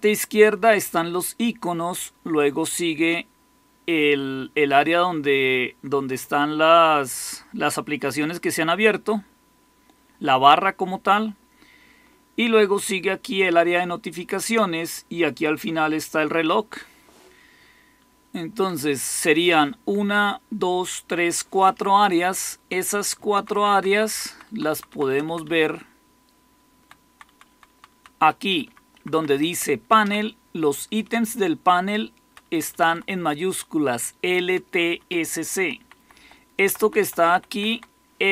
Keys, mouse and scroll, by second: 17.9-18.6 Down, 22.1 Down, 22.6 Down, 22.6-23.0 Down, 23.3 Down, 23.5 Down, 23.7 Down, 23.8 Down, 24.0 Down, 24.4 Down, 24.4 Down, 24.6 Down, 25.0 Down, 25.2-26.7 Down, 27.0 Down, 27.0 Down, 27.2 Down, 27.8 Down, 27.8 Down, 28.4 Up, 28.6 Up, 28.9 Up, 29.0 Up, 29.2 Up, 29.9 Down, 31.2-32.2 Right, 32.4 Right, 32.6 Right, 32.8 Right, 34.6 Right, 34.8 Right, 35.5 Left, 35.7 Left, 35.9 Left, 36.1 Left, 36.6 Right, 36.8 Right, 36.9 Right, 37.2 Left, 37.4 Left, 37.6 Left.